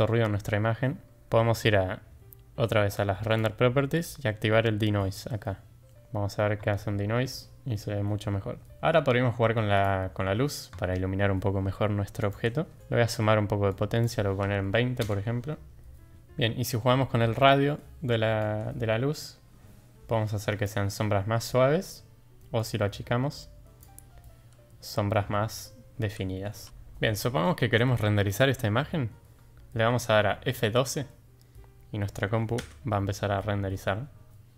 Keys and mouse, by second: 3.5 click, 9.8 click, 12.2 click, 12.8-15.0 drag, 16.1 ctrl+z, 18.5-20.7 drag, 22.7-23.8 drag, 26.6 g.